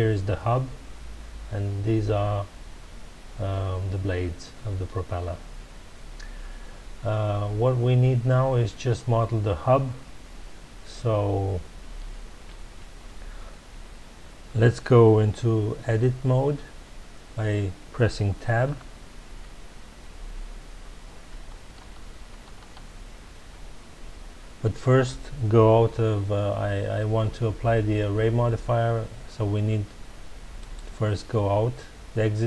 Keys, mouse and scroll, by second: 18.6 Tab, 21.3 a, 30.5-32.4 drag.